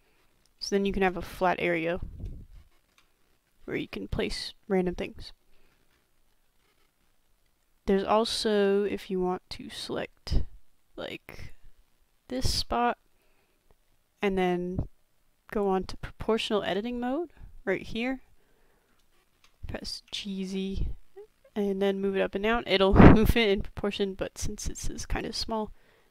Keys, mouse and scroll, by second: 0.0 middle drag, 0.7-1.0 shift+middle drag, 1.7 middle click, 2.5-3.0 shift+middle drag, 5.9-7.0 middle drag, 8.1 shift+middle click, 11.6-12.6 shift+drag, 15.3 b, 15.5 click, 19.1 shift+middle click, 20.1 g.